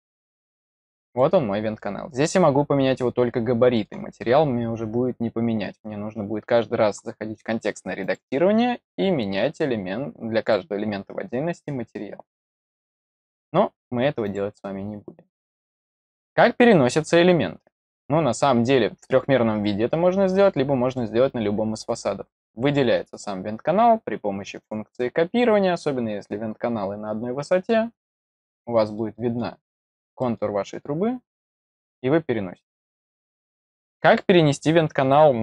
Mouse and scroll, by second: 0.5 click, 1.1-3.8 middle drag, 7.9 click, 10.3 click, 14.2 click, 17.7 click, 19.4 middle click, 20.5-22.2 middle drag, 22.2 click, 22.9 click, 24.5 click, 26.3 middle click, 27.8 click, 28.9 middle click, 30.1 middle click, 31.1 click.